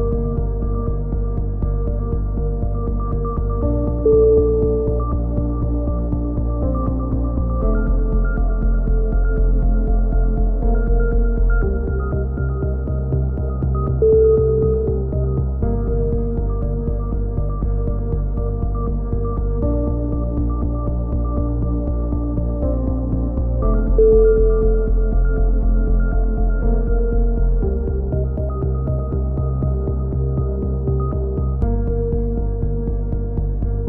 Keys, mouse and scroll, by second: 0.9 h, 4.8 ctrl+h, 5.5 h, 7.0 KP_3, 8.4 ctrl+z, 9.0 middle click, 9.3 click, 9.8 ctrl+z, 10.1 ctrl+z, 10.7 ctrl+z, 11.0 ctrl+z, 11.3 ctrl+z, 11.5 ctrl+z, 11.8 ctrl+z, 12.0 ctrl+z, 12.3 ctrl+z, 12.6 ctrl+z, 12.9 ctrl+z, 13.0-13.5 ctrl+z, 13.8 ctrl+z, 14.0 ctrl+z, 14.3 ctrl+z, 14.6 a, 15.2-16.3 drag, 15.9 ctrl+l, 16.5 h, 17.0 click, 17.7 alt+h, 18.4 h, 19.3 right click, 19.6 a, 20.3-21.6 drag, 21.6 right click, 21.9 x, 23.6 ctrl+r, 24.4 a, 24.9 click, 25.9-27.2 right drag, 26.8 s, 30.2 a, 30.5 alt+h, 31.0 click, 31.5 ctrl+l, 32.1 KP_3, 32.4 z, 33.0 click.